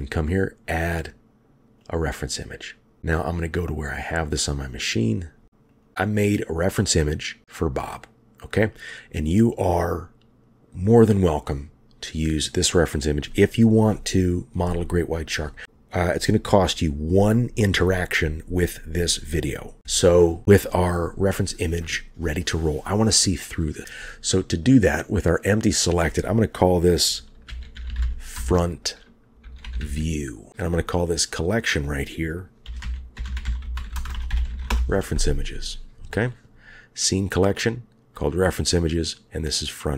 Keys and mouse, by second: 6.7 click, 22.5 click, 25.7-30.5 drag, 31.2 click, 31.4-34.7 drag, 33.4 e, 39.2-39.9 drag.